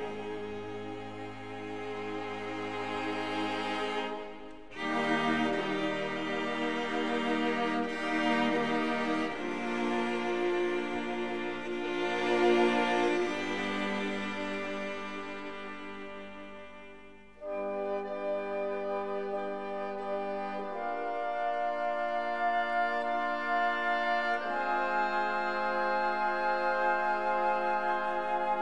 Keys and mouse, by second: 0.2-1.7 drag, 4.4 e, 4.9 click, 5.5 s, 6.0 click, 7.2-8.9 drag, 9.5-11.5 drag, 11.9-14.7 drag, 16.2 e, 17.0 click, 17.8-19.6 drag, 21.6 ctrl+r, 23.5-24.5 drag, 25.3 shift+click, 26.0 shift+click, 26.8 KP_3, 27.3 g, 27.4 z.